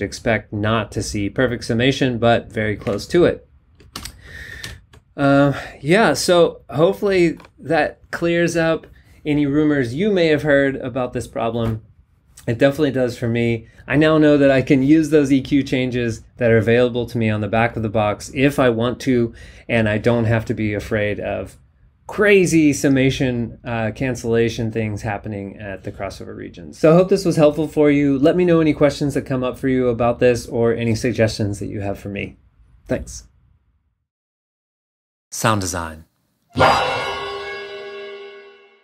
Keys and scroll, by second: 2.9 super+Tab, 3.9 super+Up, 4.7 super+Down.